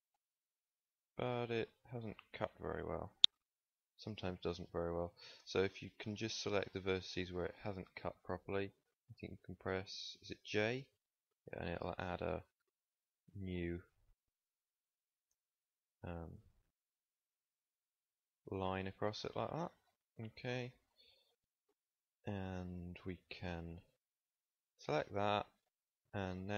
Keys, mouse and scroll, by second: 10.6 j, 11.5 click, 13.5 z, 17.1 j, 20.4 KP_1, 21.6 z, 24.1 b.